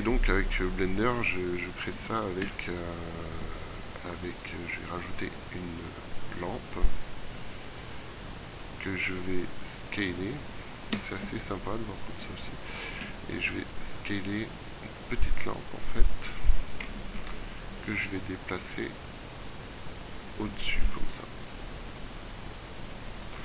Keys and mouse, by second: 2.4 shift+a, 9.6 s, 13.1 s, 17.2 middle click, 21.0 s.